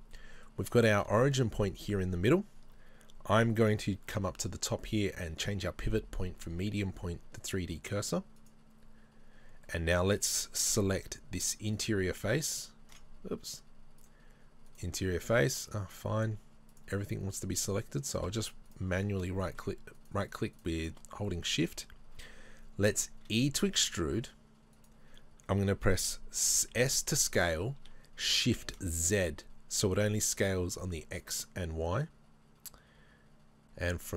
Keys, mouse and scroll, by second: 0.2 middle click, 0.8-5.0 shift+middle drag, 5.0-9.7 drag, 9.7-11.8 middle drag, 11.8 alt+right click, 14.7 alt+right click, 15.7-18.1 middle drag, 18.1 right click, 18.7 shift+right click, 19.0 shift+right click, 19.3 middle click, 20.0 shift+right click, 20.3 shift+right click, 21.1-24.9 middle drag, 23.2 e, 24.9 right click, 25.6 right click, 25.6 middle click, 26.7 s.